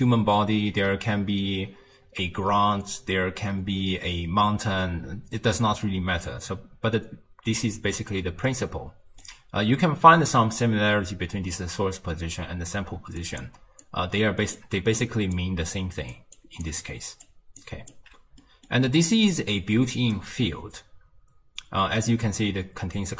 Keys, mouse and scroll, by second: 8.5-11.5 middle drag, 13.0-18.9 typing, 13.2 click, 13.8-14.6 drag, 15.0 click, 16.1 drag, 16.7-17.3 drag, 17.6 click, 18.4 middle click, 19.1-20.2 right drag, 20.2 d, 21.1 d.